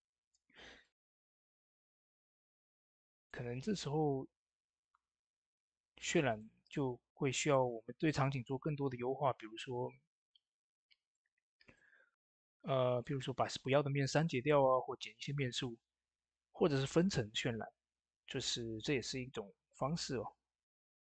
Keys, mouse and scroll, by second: 2.7 typing, 6.1 click, 6.1 typing, 10.9 click, 10.9 typing, 11.0-15.2 drag.